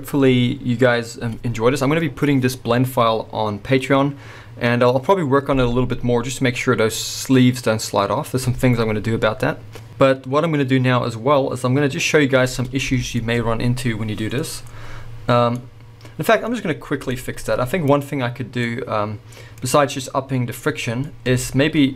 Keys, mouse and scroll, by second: 14.4-15.6 scroll up 2, 16.4-17.1 scroll up 2, 17.4-17.9 scroll up 2, 17.9 click, 18.3-18.6 scroll down 2, 18.6-21.4 middle drag, 19.6-21.4 scroll up 2.